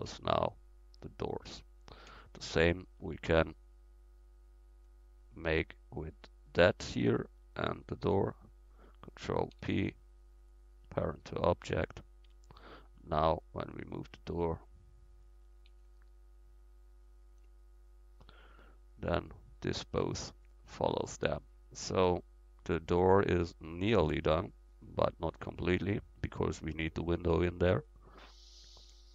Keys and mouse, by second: 3.8 ctrl+super+z, 4.6 ctrl+super+z, 5.9 click, 6.5-9.6 drag, 9.6 ctrl+p, 11.7 Tab, 12.3 Tab, 13.9-14.8 drag, 13.9-15.0 right drag, 16.4 ctrl+z, 17.8-20.8 drag, 19.1-19.7 right drag, 20.8-28.6 middle drag.